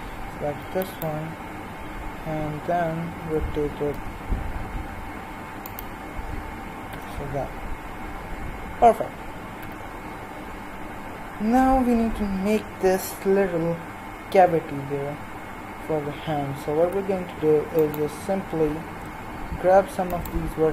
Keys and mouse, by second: 0.6-1.6 l, 3.2 r, 6.9 z, 9.6 z, 16.8 z, 17.8-20.7 right drag.